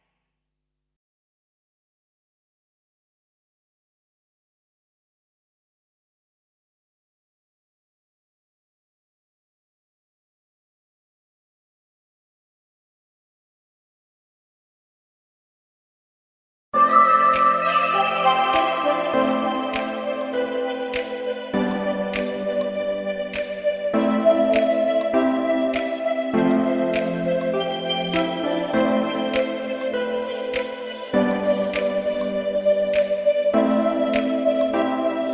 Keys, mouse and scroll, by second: 0.8 middle click, 1.5-2.1 scroll up 3, 2.1 scroll down 1, 2.4 middle click, 3.0 scroll up 1, 3.4 scroll down 1, 4.1 scroll down 1, 5.5 click, 6.2-6.8 scroll down 3, 6.7 middle click, 6.7 scroll up 1, 6.9 scroll down 1, 7.6 g, 9.2 middle click, 10.3 click, 11.0 scroll up 1, 12.1 click, 12.1 scroll up 4, 12.7 middle click, 13.6 scroll up 1, 13.9 scroll down 1, 14.5-15.0 scroll up 8, 15.0 middle click, 15.6-16.1 scroll up 2, 15.9 middle click, 16.5 scroll down 1, 17.9-18.3 scroll down 6, 18.2 middle click, 18.8 scroll up 1, 19.9 click, 19.9 scroll up 7, 23.1 scroll down 1, 23.4 middle click, 24.3 click, 25.4 click, 27.5-28.0 scroll down 3, 27.8 middle click, 28.4-29.1 scroll up 3, 28.8 click, 30.5 scroll up 1, 31.7 scroll down 3, 32.0 middle click, 32.0 scroll down 1, 32.6 click, 33.6 g.